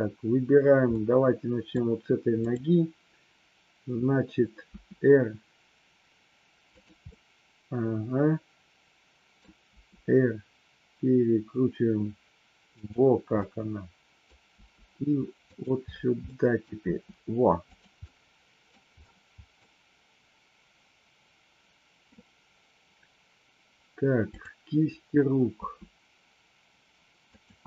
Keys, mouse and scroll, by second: 0.9-1.6 middle drag, 2.4-3.3 drag, 4.6 r, 6.8 click, 7.0-9.4 middle drag, 9.8 r, 13.4-14.3 middle drag, 14.5 r, 15.5 click, 16.3-16.6 middle drag, 16.9 r, 17.8 drag, 18.0-18.8 middle drag, 19.5-22.0 middle drag, 24.3-25.1 drag, 25.5 r, 27.3 click.